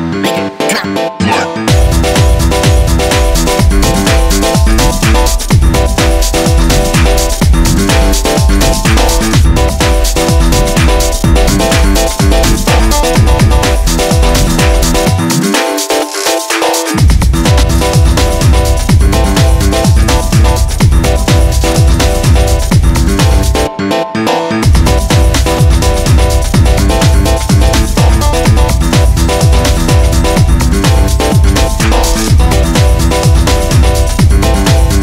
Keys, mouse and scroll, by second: 0.2-1.3 drag, 2.2 ctrl+s, 2.5 scroll down 4, 2.7-3.4 scroll up 4, 2.8 click, 3.4 click, 3.8 ctrl+s, 4.2 click, 5.7 shift+click, 6.4 click, 6.6 scroll up 1, 6.8 i, 7.6 right click, 8.5 s, 9.7 scroll up 2, 9.8 s, 10.5 i, 11.7 e, 12.9 i, 14.7 x, 15.1 click, 15.7 scroll down 1, 15.8 scroll up 2, 15.9 click, 16.2 click, 16.7 scroll up 2, 16.9 ctrl+r, 18.3 ctrl+r, 19.1 click, 19.5 scroll down 4, 19.9 scroll up 2, 20.0 click, 20.4 right click, 20.5 click, 21.2-21.6 scroll down 2, 21.6 click, 22.2 scroll up 1, 22.3 click, 22.6-23.2 scroll down 6, 22.8 ctrl+s, 23.2 scroll up 1, 23.3 click, 24.8 ctrl+s, 25.8 shift+a, 25.9 scroll down 3, 26.1 scroll up 1, 26.2 g, 26.8 scroll down 2, 27.0 click, 27.2 scroll up 1, 27.5 r, 30.3-33.4 typing, 32.4 scroll up 1, 34.8 click.